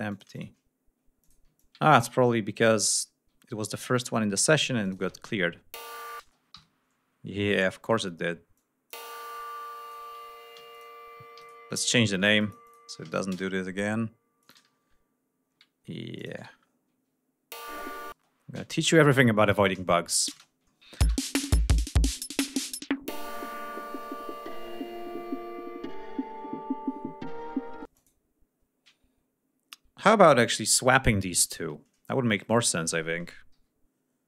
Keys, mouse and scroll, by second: 0.0 shift+click, 0.3 shift+right click, 1.1 ctrl+click, 1.5-3.1 ctrl+drag, 3.3 ctrl+scroll up 2, 3.7 ctrl+click, 4.8 click, 4.9 space, 6.1 space, 6.5 Home, 7.4 click, 7.8 d, 8.5 click, 9.4 click, 10.5 g, 10.6 click, 11.3 ctrl+right click, 12.3 click, 13.0 a, 13.2 Return, 14.3 click, 14.9-15.3 ctrl+scroll down 4, 16.1 click, 16.3 space, 16.4 ctrl+scroll up 2, 17.6 click, 18.0 space, 19.5 click, 20.1 click, 20.3 space, 20.6 ctrl+scroll down 2, 21.0 ctrl+space, 21.2 ctrl+scroll up 2, 22.4 ctrl+scroll down 2, 24.0 g, 25.1 ctrl+scroll down 2, 25.6-26.0 ctrl+scroll up 3, 26.8 ctrl+scroll up 2, 27.9 space, 28.0 click, 32.3 scroll up 2, 33.6 g.